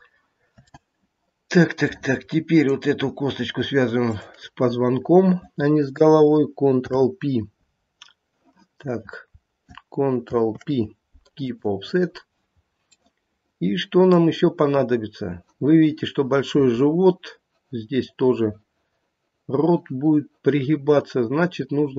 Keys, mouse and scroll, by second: 0.7 middle click, 0.7 scroll down 1, 2.5 click, 4.1 shift+click, 6.7 p, 10.2 ctrl+p, 13.1 middle click.